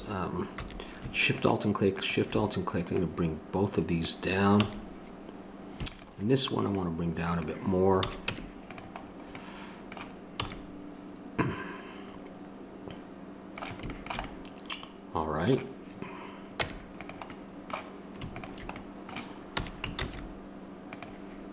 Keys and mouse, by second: 0.6 a, 4.6 a, 8.0 a, 8.3 Tab, 10.4 a, 16.6 Tab, 18.4-19.6 drag, 19.6 s.